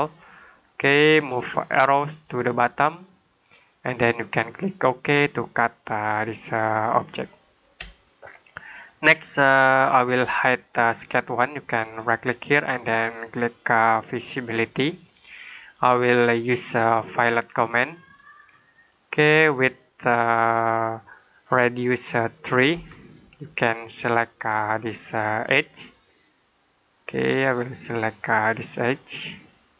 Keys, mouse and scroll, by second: 0.3 middle click, 2.1 click, 7.3 middle click, 7.8 shift+middle click, 11.8 right click, 14.3 click, 22.6 3, 25.3 click.